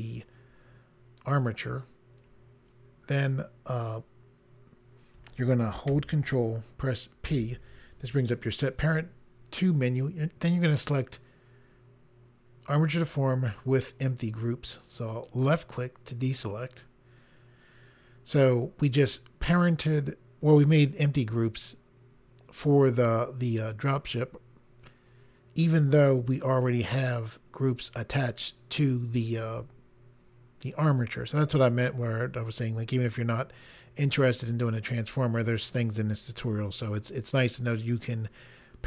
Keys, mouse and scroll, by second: 1.2 shift+click, 7.2 ctrl+p, 15.3 click.